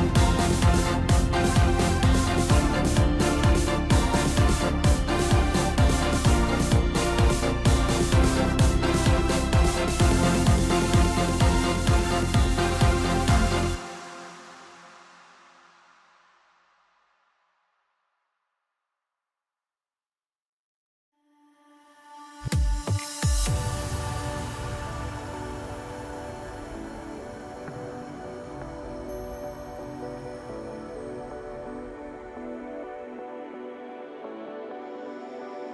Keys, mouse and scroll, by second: 0.2 click, 0.7-1.5 middle drag, 1.5-1.9 scroll up 2, 1.9-2.9 middle drag, 2.9-3.8 scroll down 2, 5.8-6.8 drag, 6.8-7.8 scroll down 1, 8.8 click, 9.5-10.3 scroll up 1, 10.3 click, 10.9-11.7 scroll up 2, 12.2 Tab, 13.9 KP_Decimal, 15.0-15.5 scroll down 2, 15.5-16.8 middle drag, 16.8 s, 25.9-26.4 scroll down 7, 26.9 Tab, 27.7 scroll down 4, 27.9-30.0 middle drag, 30.0 scroll down 2, 30.3-31.5 middle drag, 31.5-33.1 scroll up 4, 33.6-35.7 drag.